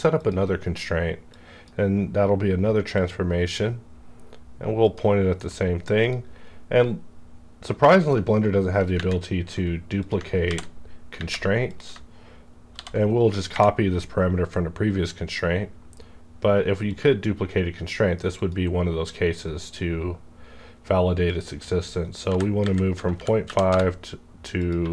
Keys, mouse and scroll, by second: 1.6-4.8 drag, 6.5 scroll down 1, 8.0 click, 9.9 click, 10.5 ctrl+v, 11.6 click, 12.8 ctrl+c, 16.1 ctrl+c, 16.1 scroll up 1, 16.8 click, 18.3 click, 21.3 click, 22.3 KP_Decimal, 22.6 KP_5, 22.9 Tab, 23.2 KP_Decimal, 23.4 KP_1, 23.6 KP_Enter, 24.5 click, 24.8 1.